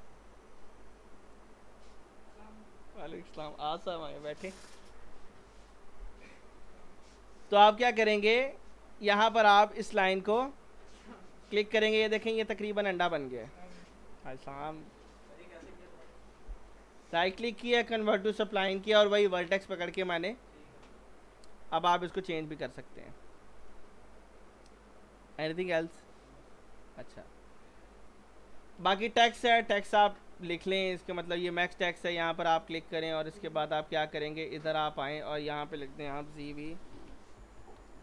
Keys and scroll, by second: 36.2-37.4 typing.